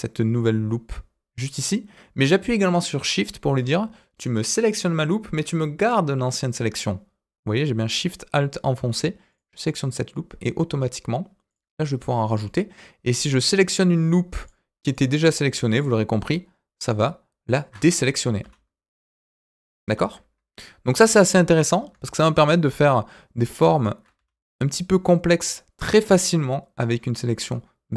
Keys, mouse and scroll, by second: 9.3 alt+shift+click, 11.4 alt+shift+click, 12.2 alt+shift+click, 14.4 alt+shift+click, 14.9 alt+shift+click, 15.7 alt+shift+click, 16.7 alt+shift+click, 17.4 alt+shift+click, 18.0 middle click, 18.4 s, 21.5 alt+click, 22.7 alt+shift+click, 23.7 alt+shift+click, 24.1 s, 26.3-27.9 middle drag.